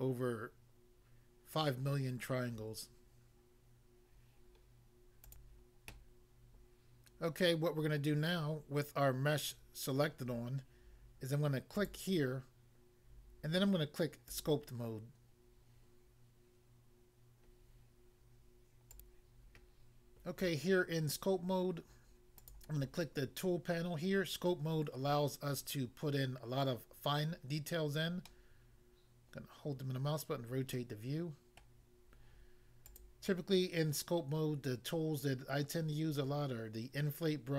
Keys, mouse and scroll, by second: 5.3 click, 5.4 click, 11.7 click, 14.3 click, 18.9 click.